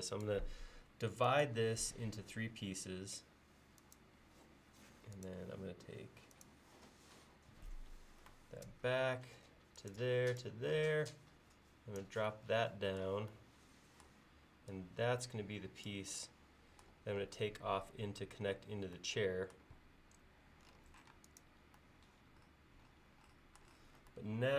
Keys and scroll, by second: 4.4 l, 10.9 p, 21.2 space.